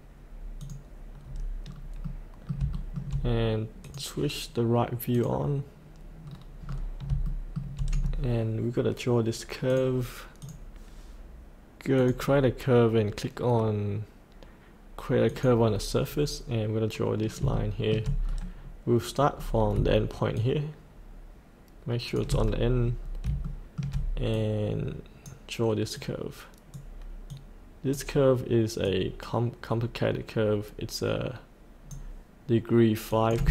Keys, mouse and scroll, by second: 0.6 click, 1.2 scroll up 1, 2.1 middle click, 2.7 shift+middle click, 3.9 click, 6.2-6.7 scroll down 2, 7.3 shift+middle click, 8.0-8.8 scroll down 1, 9.7-11.5 drag, 16.0-17.4 scroll up 1, 17.5 shift+middle click, 18.2-19.3 scroll down 1, 20.4-22.2 shift+drag, 22.5-23.0 scroll up 1, 23.4 shift+middle click, 24.3-32.8 drag.